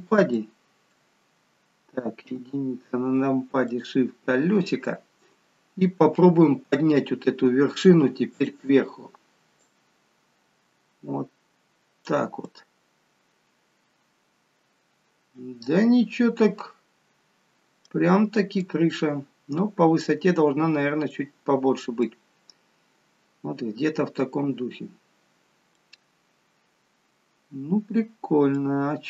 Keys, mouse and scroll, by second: 0.3 alt+middle click, 2.3 KP_1, 3.7 shift+middle click, 8.3 click, 9.6 click, 12.5 middle click, 18.6 click, 20.4-21.0 scroll down 4, 21.0 middle click, 22.3-23.8 scroll up 1, 23.8 scroll up 2, 25.8 middle click.